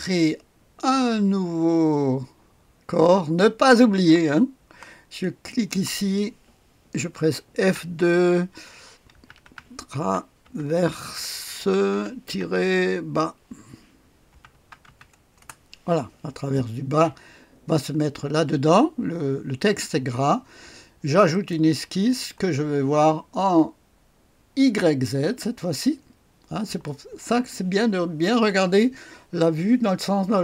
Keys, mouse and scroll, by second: 3.4 click, 5.5 click, 7.6 F2, 9.1-12.8 typing, 14.0-15.3 typing, 15.4 Return, 17.3-18.2 scroll down 1, 18.2-19.0 typing, 21.3 click.